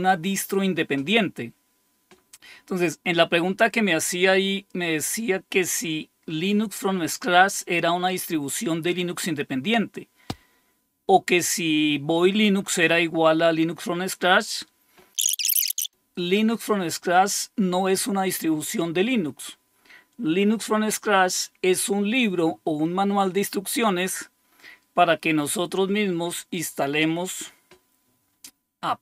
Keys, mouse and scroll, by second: 15.8 click.